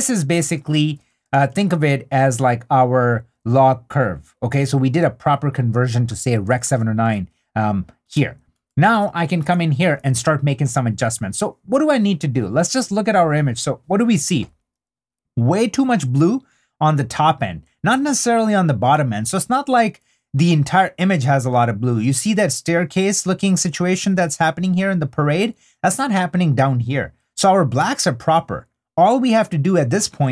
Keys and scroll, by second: 0.0 super+d, 7.7 super+d.